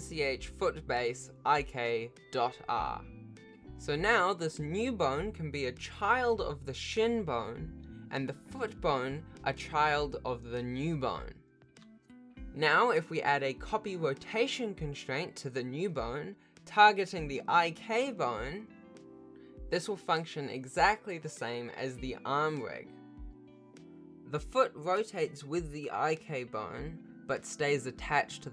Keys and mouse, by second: 2.0 o, 4.5 ctrl+p, 4.5 alt+a, 6.2 ctrl+p, 7.7 ctrl+Tab, 9.0 g, 9.9 Tab, 10.7 shift+click, 11.5 ctrl+p, 12.3 alt+a, 13.2 ctrl+Tab, 13.6 click, 15.3 shift+click, 17.6 ctrl+alt+shift+a, 18.3 click, 18.5 g, 23.5 ctrl+s, 23.8 click, 24.2 g, 24.8 r, 27.7 alt+g.